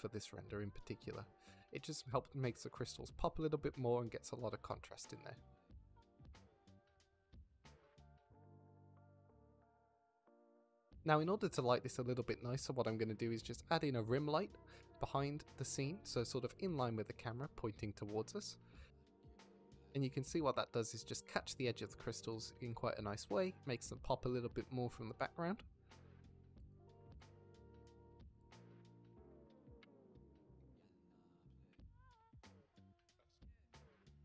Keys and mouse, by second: 1.1 middle click, 2.2-4.5 middle drag, 5.2 middle drag, 5.6 shift+middle click, 5.9 middle click, 7.0 middle click, 7.9-8.9 middle drag, 10.1-11.8 drag, 13.0 ctrl+middle drag, 13.3 ctrl+s, 13.7 shift+drag, 14.1 drag, 15.3 shift+d, 15.9 click, 16.1 r, 16.4 z, 16.8-17.1 drag, 17.1 g, 17.5-18.0 drag, 18.2 click, 18.5 r, 19.1 g, 19.3 click, 19.8 drag, 20.3 g, 21.5-22.4 drag, 23.5-27.7 drag, 28.1 click, 28.6 g, 28.9 z, 29.1 z, 31.4 click, 31.5 g, 31.7 z, 31.9 z, 32.4-34.2 drag.